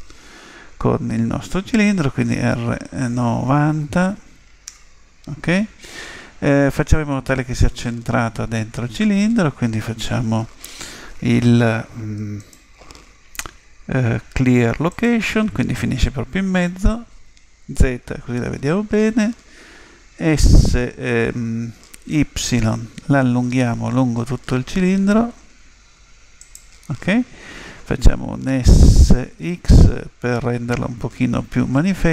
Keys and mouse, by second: 2.2 r, 17.8 z, 21.6 s, 29.0 s.